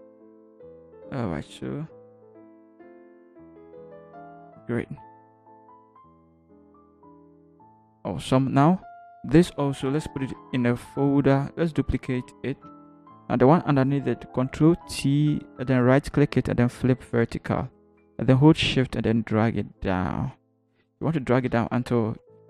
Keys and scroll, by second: 0.0 Up, 0.1 Up, 0.4 Up, 1.2 Down, 2.9 Up, 3.3 Up, 10.4 ctrl+g, 12.6 ctrl+j, 14.6 ctrl+t, 21.3 shift+Down, 22.1 Up, 22.3 Up.